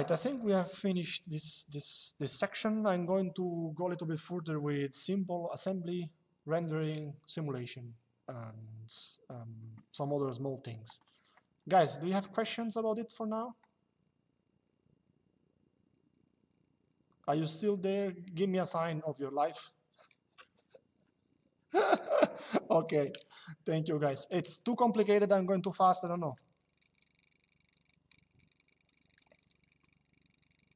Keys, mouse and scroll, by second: 10.7 click, 11.4 middle click.